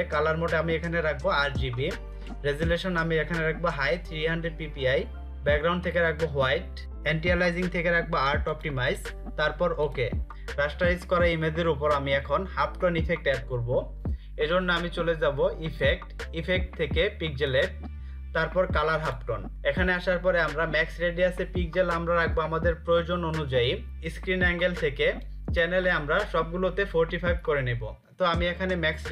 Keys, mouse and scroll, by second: 8.0 click, 15.3 click.